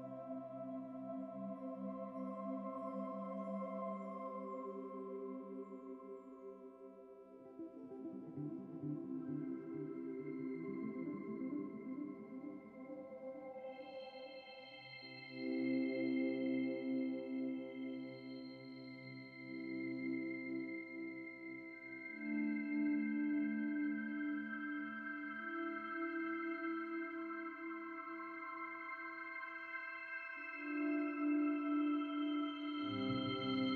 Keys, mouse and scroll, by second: 0.3 click, 1.7-5.3 shift+middle drag, 10.5 scroll down 3, 10.8-11.2 shift+middle drag, 11.2-11.6 scroll up 3, 11.8-13.7 shift+middle drag, 14.8-15.6 scroll up 3, 15.9 scroll down 8, 16.3 middle click, 17.2-17.5 scroll down 3, 24.9 click, 25.7 click, 28.9 click, 30.1 click.